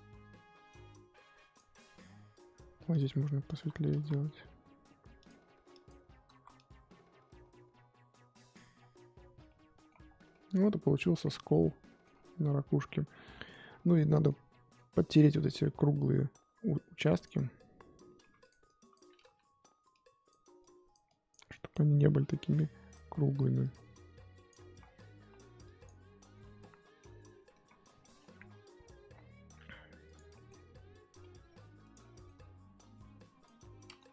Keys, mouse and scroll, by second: 3.4 click, 3.9 ctrl+z, 5.7 click, 6.3 ctrl+z, 6.5-8.7 drag, 8.7-9.4 scroll down 7, 9.5 middle click, 9.9 scroll up 1, 10.0 scroll down 1, 10.3 middle click, 11.0-11.6 scroll up 4, 11.6-13.3 scroll up 5, 11.7 middle click, 13.3 middle click, 13.5-13.9 scroll up 7, 13.9 scroll down 1, 13.9-17.2 middle drag, 17.2 click, 18.2 f, 18.6 click, 19.2 ctrl+z, 19.9-24.8 drag, 24.8-25.2 scroll down 5, 25.2-25.6 scroll up 3, 25.6 click, 26.3-27.0 scroll down 11, 27.0 middle click, 27.6-28.0 scroll up 4, 28.0 middle click, 28.3-30.1 scroll up 5, 30.1 click, 30.3 middle click, 30.5-31.1 scroll up 1, 31.1 f, 32.0-33.2 middle drag, 33.2-34.1 drag.